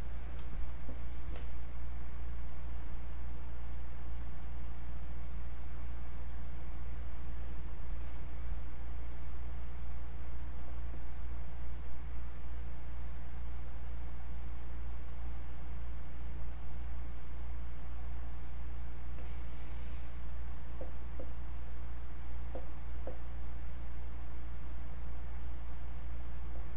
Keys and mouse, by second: 2.5 click, 19.1 click.